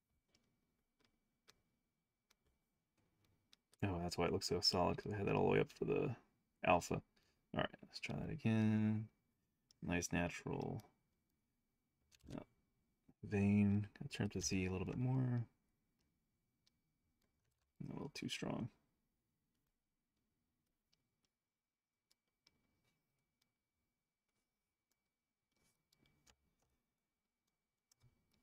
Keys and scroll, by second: 3.6 o, 4.7 s, 6.2-7.3 typing, 13.3 s.